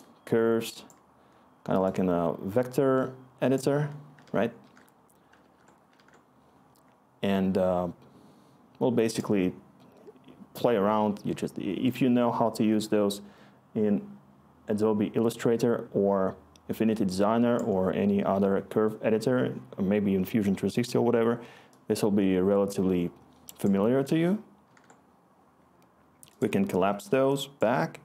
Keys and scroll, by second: 4.2 ctrl+z, 4.6 ctrl+z, 5.4 ctrl+z, 5.9 ctrl+z, 24.1 ctrl+z, 24.6 ctrl+z.